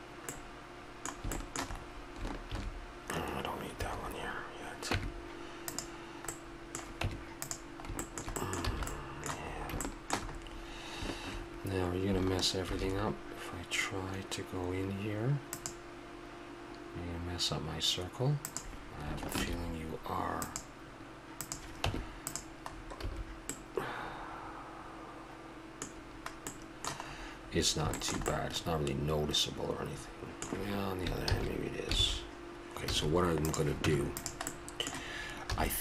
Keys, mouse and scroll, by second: 0.6-2.5 middle drag, 2.5 ctrl+r, 4.9 Tab, 7.0 Tab, 8.7 a, 12.6 ctrl+r, 19.4 ctrl+r, 21.9 Tab, 22.8 click, 23.1 a, 24.5-25.2 middle drag, 25.9-26.5 middle drag, 26.7-29.0 middle drag, 29.2-29.5 middle drag, 31.3 ctrl+z, 32.0 ctrl+z, 32.9 a, 33.5-33.8 right drag, 33.8 Tab, 34.6 middle click, 35.5 a.